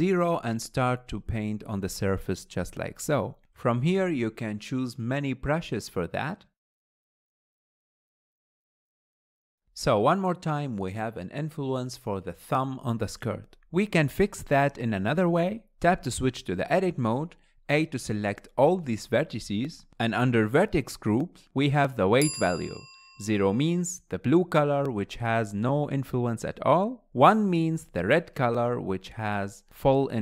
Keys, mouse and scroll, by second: 2.9-3.3 scroll down 3, 3.5 shift+middle click, 3.8 click, 3.9 scroll up 2, 5.1-7.2 drag, 7.5 middle click, 7.8 ctrl+click, 9.5-11.4 middle drag, 13.2 Tab, 18.3 Tab.